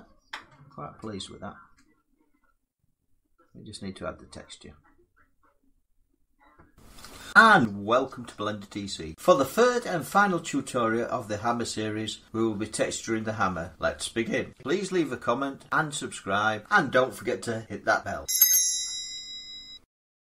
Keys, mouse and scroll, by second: 0.9 middle click, 0.9 scroll down 2, 1.0 middle click, 1.7 scroll, 1.7 middle click, 2.0 middle click, 2.2 scroll down 4, 4.2 scroll.